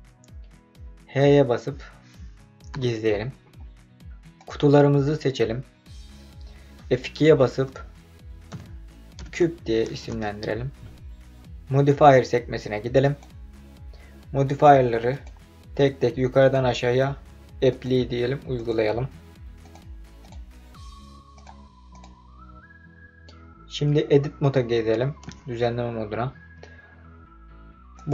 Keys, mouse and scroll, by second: 2.7 h, 4.3 click, 7.2 F2, 13.0 click, 15.1-16.6 drag, 17.7-18.8 drag, 19.6-20.4 drag, 21.3-22.1 drag, 25.6 Tab, 27.9 click.